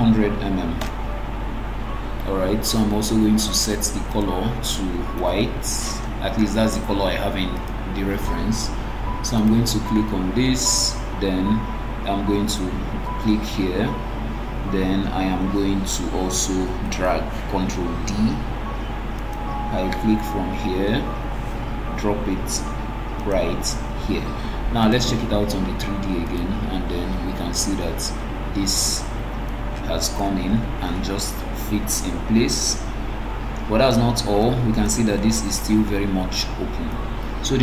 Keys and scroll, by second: 0.9 Return, 16.6 ctrl+d.